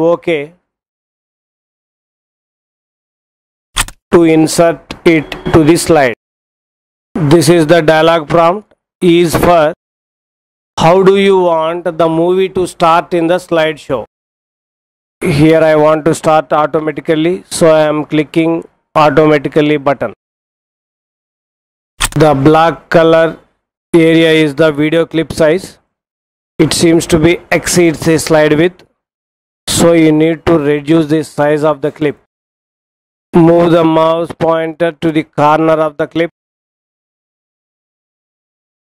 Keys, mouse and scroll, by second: 3.7 click, 21.9 click.